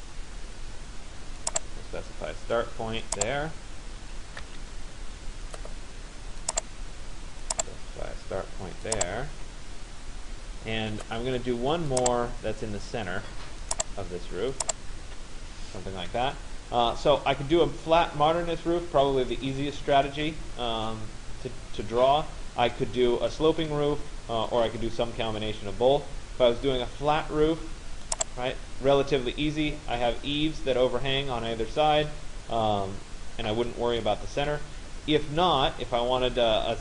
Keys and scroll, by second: 4.1 Return, 9.0 Return, 14.6 Return.